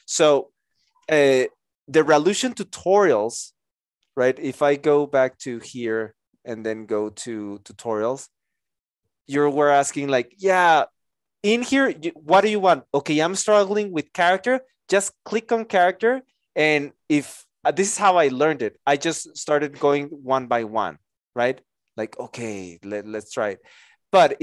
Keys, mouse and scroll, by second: 3.8 Return.